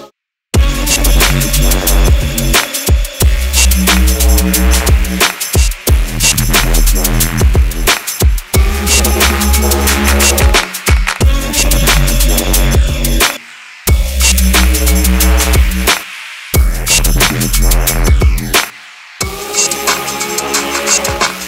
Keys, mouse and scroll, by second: 3.2-5.1 typing, 6.0-11.8 alt+drag, 13.8-14.5 alt+drag, 15.4 right click, 16.7 click, 19.5 click, 19.6 click.